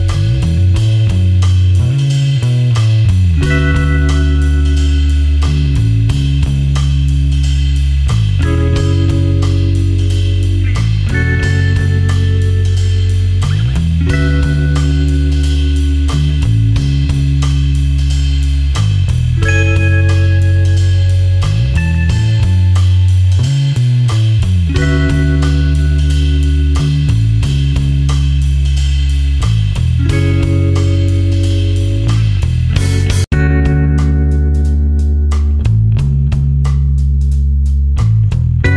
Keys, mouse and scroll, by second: 3.6 click, 4.0 space, 4.4 ctrl+alt+click, 19.1 ctrl+space, 19.4 ctrl+alt+click, 25.5 click, 31.1 v, 31.7 ctrl+click, 32.1 space, 32.3 click, 32.4 space, 33.7 click, 34.1 space, 34.5 ctrl+alt+click.